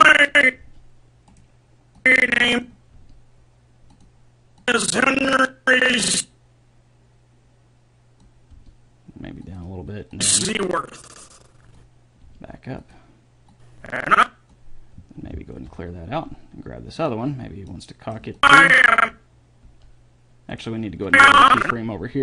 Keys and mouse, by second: 0.8 g, 3.2 g, 8.7 g, 10.3-11.5 drag, 12.5 g, 15.9 alt+g, 17.2-18.8 middle drag, 18.6 click, 18.6 right click, 19.9 g.